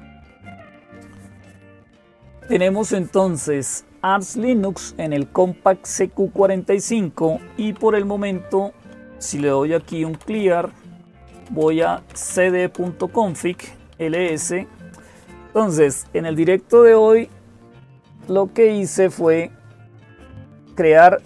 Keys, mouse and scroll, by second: 0.0-21.2 typing, 0.2 Return, 20.5-21.2 drag.